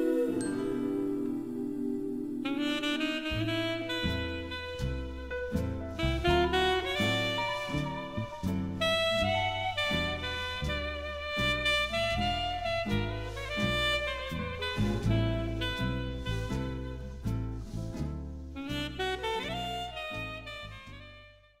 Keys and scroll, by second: 12.5 Return.